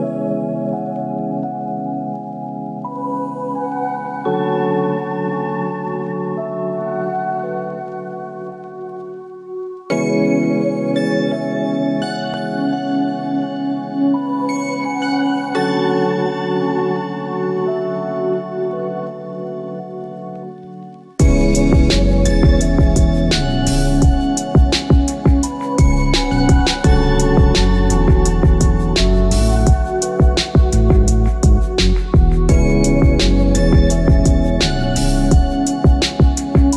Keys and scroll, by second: 4.8 Return.